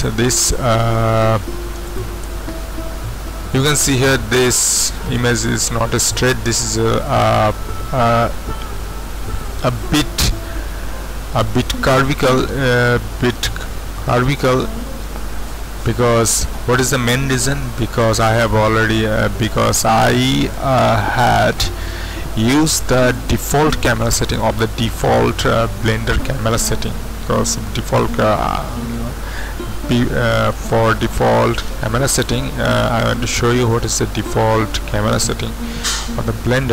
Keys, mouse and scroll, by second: 1.9 click, 2.4 right click, 23.1 click, 32.1 click, 33.7 click, 35.2 click.